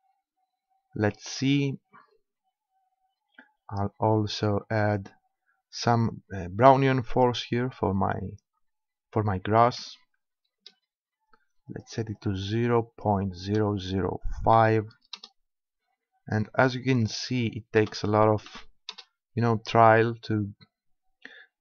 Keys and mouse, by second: 3.0-6.5 middle drag, 7.1-8.9 drag, 11.7-13.5 drag, 16.6-18.5 drag.